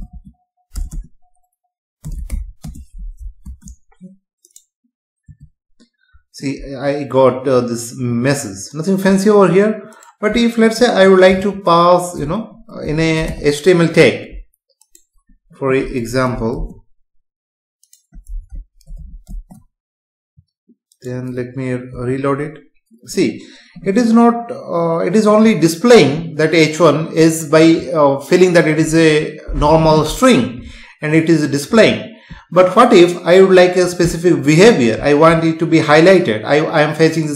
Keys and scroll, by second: 0.8 BackSpace, 2.6 space, 3.4 ctrl+s, 5.3 F5, 16.0 shift+Right, 16.5 ctrl+x, 18.9 ctrl+v, 19.3 ctrl+s, 22.0 F5.